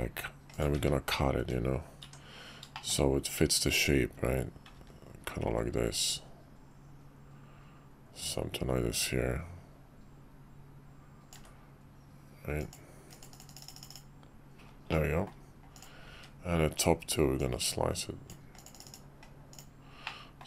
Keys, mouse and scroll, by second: 1.4 `, 2.0 Tab, 2.7 shift+click, 3.8-11.3 drag, 13.9 click, 14.9-15.3 middle drag, 15.7 click, 17.4-18.3 drag, 20.0-20.4 middle drag.